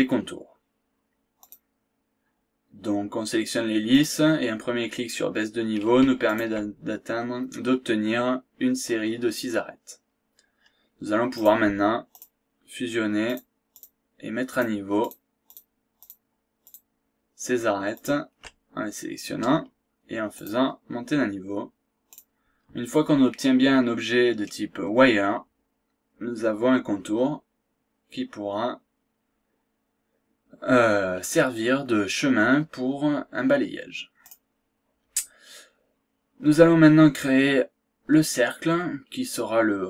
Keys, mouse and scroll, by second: 1.4 click, 3.9 click, 6.2 shift+click, 11.3 click, 12.1 ctrl+click, 13.2 ctrl+click, 13.8 ctrl+click, 14.6 ctrl+click, 15.1 ctrl+click, 15.4 ctrl+click, 16.0 ctrl+click, 16.6 ctrl+click, 18.0 ctrl+click, 20.3 click, 22.1 click, 25.8-26.2 scroll down 1, 26.2-27.1 scroll up 4, 27.4-27.8 scroll down 2, 31.0-31.4 scroll down 2, 31.6-31.9 scroll up 2, 32.1 scroll down 1, 33.8 scroll down 1, 34.0 scroll up 1, 34.2 click, 36.7 scroll up 1, 38.9-39.3 scroll down 1, 39.3-39.7 scroll up 1.